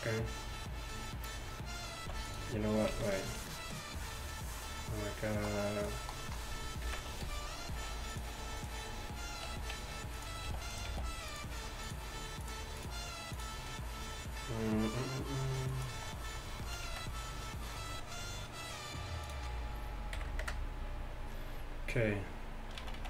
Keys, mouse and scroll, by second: 2.7 x, 3.1 z, 5.9-6.9 drag, 6.9 KP_1, 7.2 shift+a, 9.5 r, 10.5 g, 12.9 s, 17.3 shift+z, 19.8 click, 23.0 z.